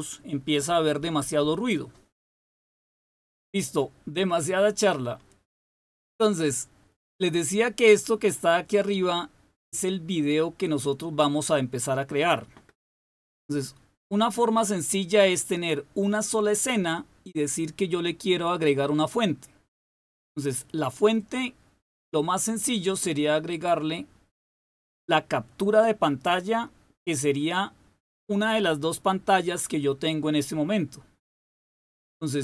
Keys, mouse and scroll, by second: 21.2 click, 31.9 click.